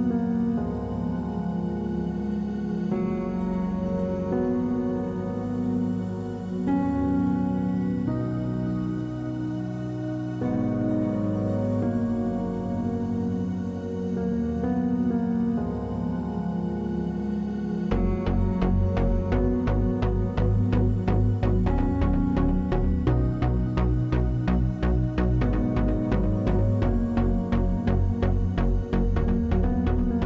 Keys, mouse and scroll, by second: 0.1 click, 0.6 click, 0.7 middle click, 0.9 scroll down 1, 1.0 scroll up 1, 1.0 middle click, 1.4 click, 1.8 scroll down 1, 1.8 middle click, 2.0 scroll up 1, 2.0 shift+middle click, 2.2 f, 2.5 middle click, 2.5 click, 2.6 click, 2.7 middle click, 2.7 scroll down 1, 2.9 middle click, 3.0 scroll up 1, 3.1 click, 3.3 middle click, 3.5 middle click, 3.7 middle click, 3.7 click, 3.8 click, 3.9 middle click, 4.1 middle click, 4.3 middle click, 4.4 middle click, 4.5 middle click, 4.6 click, 4.7 middle click, 4.8 scroll up 2, 4.9 middle click, 5.1 middle click, 5.2 click, 5.3 middle click, 5.5 middle click, 5.5 scroll down 2, 5.6 middle click, 5.7 middle click, 5.8 shift+middle click, 6.0 click, 6.1 middle click, 6.2 click, 6.5 click, 6.6 middle click, 6.7 middle click, 7.0 click, 7.1 middle click, 7.4 click, 7.4 middle click, 7.5 middle click, 7.8 middle click, 8.1 click, 8.3 middle click, 8.8 click, 8.9 middle click, 9.1 middle click, 9.3 click, 9.5 click, 9.7 click, 10.0 click, 10.2 middle click, 10.4-10.7 scroll up 3, 10.5 shift+middle click, 10.7 click, 10.8 middle click, 10.8 click, 11.3 middle click, 11.5 click, 11.8 middle click, 12.1 click, 12.4 scroll down 2, 12.4 middle click, 12.5 scroll up 2, 12.5 middle click, 12.7 click, 12.9 middle click, 13.0 middle click, 13.1 middle click, 13.2 scroll up 1, 13.2 middle click, 13.5 click, 14.0 middle click, 14.1 click, 14.2 middle click, 14.5 middle click, 14.8 click, 15.2 middle click, 15.4 shift+middle click, 15.5 click, 15.7 middle click, 16.0 middle click, 16.3 click, 16.5 middle click, 16.8 click, 17.0 click, 17.1 scroll down 1, 17.1 middle click, 17.6 middle click, 17.6 click, 17.7 scroll up 3, 17.9 click, 18.0 f, 18.3 f, 18.5 click, 19.2 click, 19.4 f, 20.0 click, 20.1 f, 20.5 scroll down 2, 20.5 middle click, 20.8 shift+middle click, 20.9 click, 21.1 middle click, 21.5 scroll up 1, 21.6 click, 21.8 scroll down 1, 22.1 click, 22.2 f, 22.4 click, 22.8 click, 22.9 f, 23.3 scroll up 2, 23.3 middle click, 23.4 scroll down 1, 23.5 click, 23.8 click, 23.9 f, 24.5 click, 25.1 click, 25.4 middle click, 25.6 middle click, 25.9 click, 26.1 middle click, 26.2 f, 26.6 middle click, 26.7 scroll down 2, 26.9 click, 27.0 middle click, 27.2 scroll up 2, 27.3 middle click, 27.6 click, 27.7 click, 27.8 click, 28.0 f, 28.2 middle click, 28.3 f, 28.6 click, 28.8 f, 29.0 click, 29.4 middle click, 29.6 middle click, 29.8 click, 29.9 middle click, 30.0 click, 30.1 middle click.